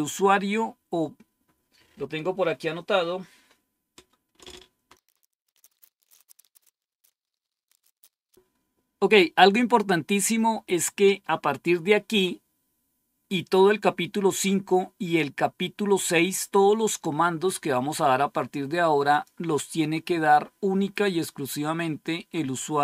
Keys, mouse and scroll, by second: 14.7-15.7 scroll down 1, 16.1-17.1 scroll up 2, 19.0 click, 21.5-22.8 drag.